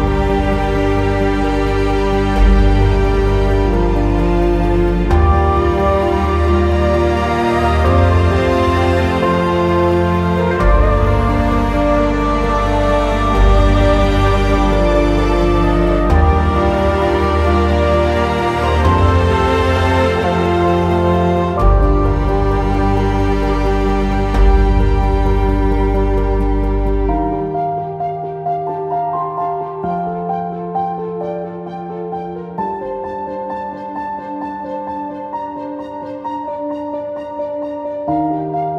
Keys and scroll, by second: 8.4 e, 9.7 ctrl+z, 13.6 e, 18.3 w.